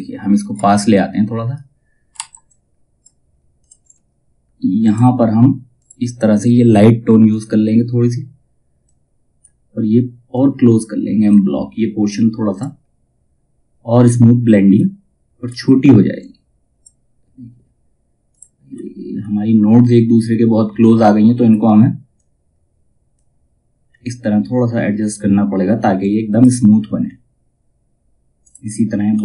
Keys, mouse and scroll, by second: 0.0 space, 0.4 click, 1.7 F2, 2.0 click, 3.3 space, 4.3-14.8 drag, 14.8-15.7 scroll up 1, 15.7-17.8 drag, 18.2-18.7 scroll up 1, 20.3-23.3 drag, 23.3 scroll down 1, 25.5 click, 26.5-27.9 scroll down 1, 27.9 click, 28.6-29.2 scroll up 1.